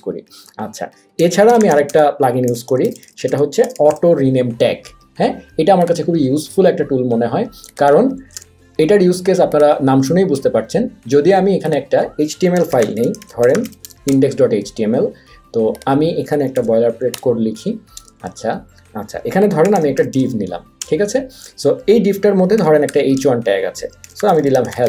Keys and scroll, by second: 0.9-3.7 typing, 8.2 super+a, 8.3 BackSpace, 12.4-14.1 typing, 16.6 shift+1, 17.1 Return, 18.1 Tab, 18.3 Tab, 19.4-20.5 typing, 20.8 Return, 22.6-24.8 typing, 23.2 Tab.